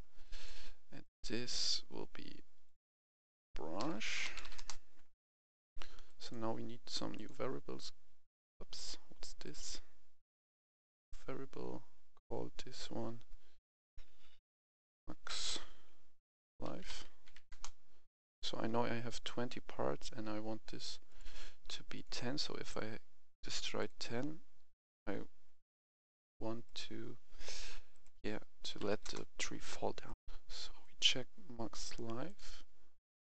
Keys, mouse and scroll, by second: 0.2 click, 3.7-4.4 typing, 4.5 Return, 5.4 click, 10.4-10.9 scroll down 2, 14.8-15.2 typing, 16.6-17.3 typing, 17.4 Return, 18.1-27.6 drag, 28.7 typing, 29.0 Return, 30.0 click, 30.1 F10, 30.8-32.0 drag, 32.8 scroll up 1.